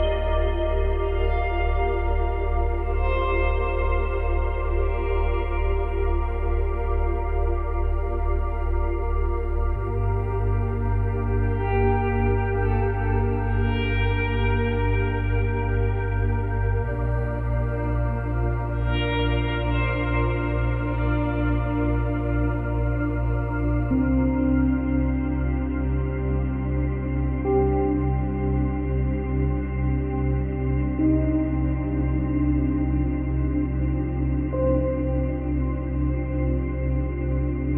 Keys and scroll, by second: 0.4 ctrl+z, 3.8 space, 6.2 space, 14.2 space, 15.4 space, 35.5 space.